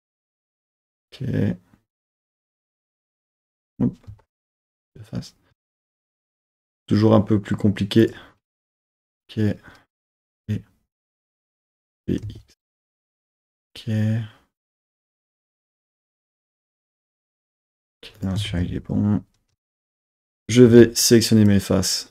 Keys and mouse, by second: 0.3 z, 3.6 KP_1, 4.1 z, 5.6 z, 8.0 click, 8.8 KP_1, 10.2 g, 10.2 g, 11.4 click, 12.0 g, 12.2 x, 13.3 click, 15.3 click, 15.9 KP_1, 16.9 z, 17.4 g, 18.2 click, 18.5 super+z, 19.6 z, 20.7 3, 21.0 click, 21.5 click.